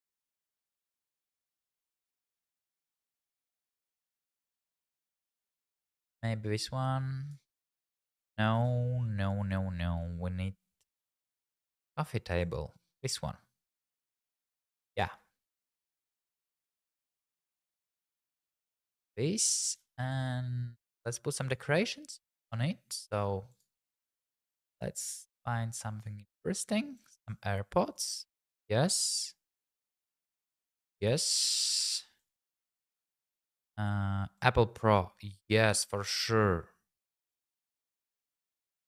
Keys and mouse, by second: 1.4 click, 9.2 ctrl+z, 12.4 click, 13.8 middle click, 14.1 g, 14.3 shift+z, 14.9 click, 16.5 g, 17.9 click, 18.4 `, 19.5 g, 19.8 shift+z, 21.6 click, 23.5 click, 30.1-31.9 typing, 30.9 click, 31.6 click, 32.2 click.